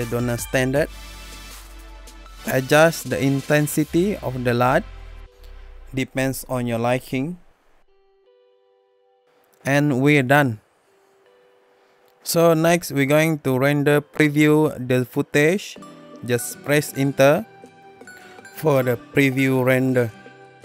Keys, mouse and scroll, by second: 10.4 click, 12.0 Home, 12.7 Return.